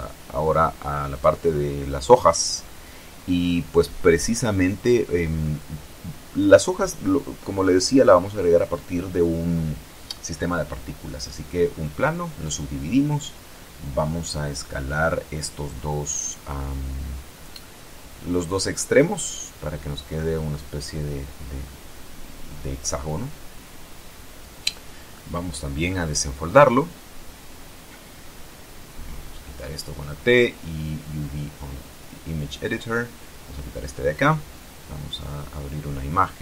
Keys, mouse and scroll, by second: 1.3-4.5 drag, 5.2 KP_7, 6.8 scroll up 2, 7.2 shift+click, 8.1 shift+Tab, 10.3 w, 11.2 click, 13.1 right click, 14.1 shift+right click, 14.9 shift+s, 16.3 click, 17.6 right click, 18.6 shift+right click, 19.3 shift+s, 20.6 click, 21.3 Tab, 23.3 Tab, 23.6 a, 24.8 u, 25.6 click, 27.7-29.1 drag, 29.3 t, 30.6 click, 32.0 click, 34.4 click.